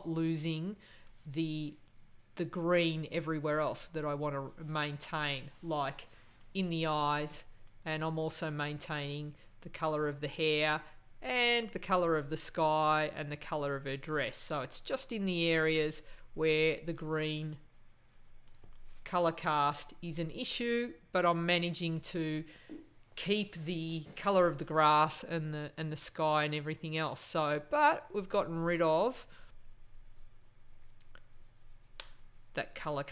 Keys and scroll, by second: 6.9 space, 12.0 space, 18.5 space.